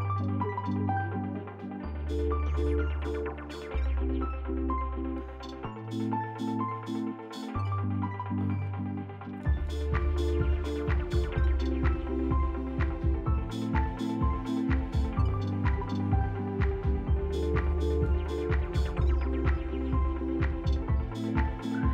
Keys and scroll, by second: 5.8 p, 8.4 s, 8.9 l, 9.1 F3, 9.2 F4, 9.7 F3, 10.5 e, 18.7 b, 19.0 Delete, 20.0 Delete.